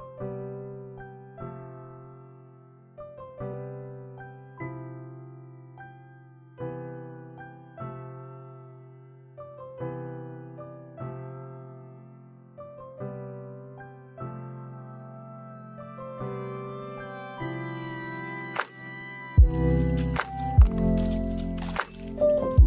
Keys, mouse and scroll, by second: 0.7 click, 1.5 click, 1.8 click, 2.7 click, 3.8 click, 4.9 click, 6.1 click, 6.6 scroll up 1, 6.7 middle click, 7.9 click, 8.0 middle click, 8.9 click, 9.3 middle click, 9.5 middle click, 9.9 scroll up 2, 10.0 middle click, 10.4 scroll down 3, 10.5 middle click, 10.9 click, 11.1 click, 11.6 KP_0, 12.9 click, 14.3 click, 16.2 click, 17.3 click, 18.4 space, 20.7 middle click.